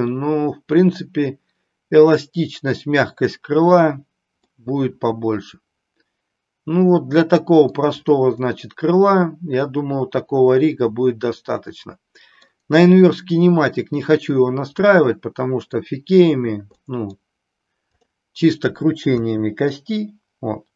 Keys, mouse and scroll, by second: 4.5-7.8 middle drag, 8.6-12.4 middle drag, 14.9-15.9 middle drag, 16.7 middle click, 17.9-19.6 drag, 19.6 r.